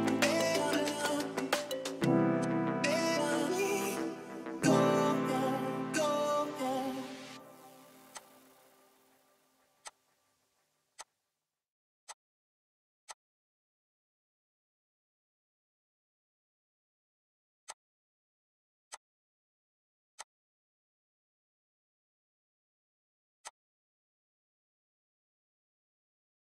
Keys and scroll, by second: 7.2 m, 10.5 p, 12.7 e, 13.5 Escape, 17.0 r, 20.0 space, 23.5 ctrl+h, 23.5 p, 24.9-26.5 typing.